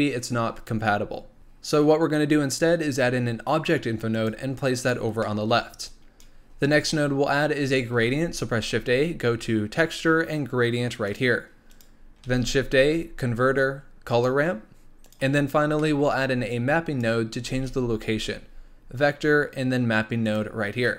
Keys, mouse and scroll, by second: 5.2-5.8 middle drag, 5.8-6.9 drag, 6.9-7.9 middle drag, 7.9 shift+a, 12.2 shift+a, 15.8-16.5 middle drag, 16.5 click, 17.5 shift+a.